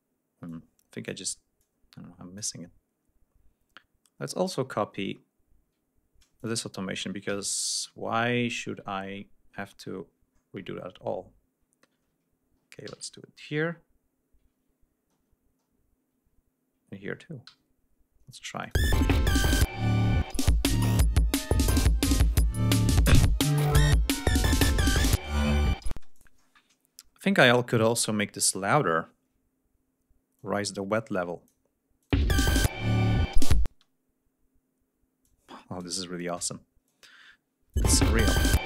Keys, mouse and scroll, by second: 0.5 click, 1.6 click, 3.0-3.6 scroll down 2, 4.0-5.1 scroll down 4, 5.2 scroll up 2, 6.4 ctrl+click, 7.3 ctrl+c, 7.6 ctrl+scroll down 2, 8.8-10.1 ctrl+scroll up 5, 10.3-10.8 scroll up 2, 11.1 ctrl+scroll up 2, 12.9 ctrl+v, 14.6 ctrl+scroll down 2, 15.3 ctrl+scroll up 3, 17.4 ctrl+v, 18.6 click, 18.8 space, 20.4 g, 20.8 ctrl+scroll down 2, 21.1 ctrl+scroll up 2, 22.6 scroll down 2, 23.0 ctrl+scroll up 2, 23.6-24.2 ctrl+scroll down 4, 24.2-24.5 scroll up 2, 25.9 space, 26.1 click, 26.4-27.2 scroll down 3, 27.4 scroll down 2, 27.9 scroll up 2, 28.2 scroll down 2, 28.9 ctrl+scroll down 2, 30.4-31.7 drag, 32.0 ctrl+click, 32.1 space, 32.3 ctrl+scroll up 2, 33.7 ctrl+space, 35.2 click, 36.0 ctrl+scroll down 2, 36.9-37.9 drag, 37.8 space, 38.0 ctrl+scroll up 2.